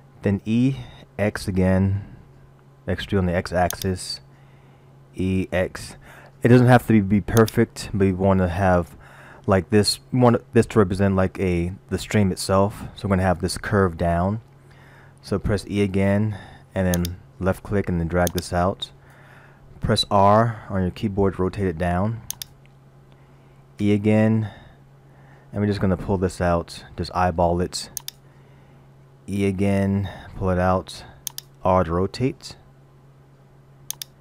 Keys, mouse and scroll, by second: 0.5 e, 5.1 e, 15.8 e, 18.3 click, 20.9 r, 23.8 e, 29.3 e, 32.5 r.